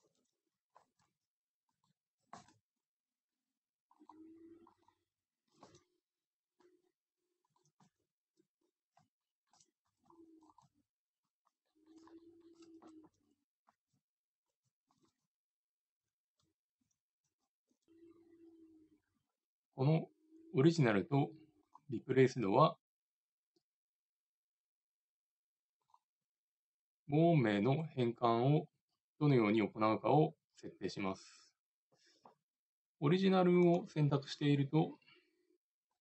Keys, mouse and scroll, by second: 0.0 ctrl+z, 0.8 ctrl+Tab, 1.8-2.9 right drag, 2.5 Tab, 4.2-5.8 drag, 4.2 right click, 5.7 g, 6.0 click, 7.0 middle click, 7.9 right click, 7.9 g, 9.3 middle click, 9.9 a, 10.1 c, 10.8 g, 11.1 middle click, 11.8 middle click, 13.8 ctrl+Tab, 15.0 a, 15.2 a, 16.5 alt+r, 16.8 alt+g, 17.0 alt+s, 21.6-23.6 drag, 25.8-27.8 drag, 33.6-36.0 drag.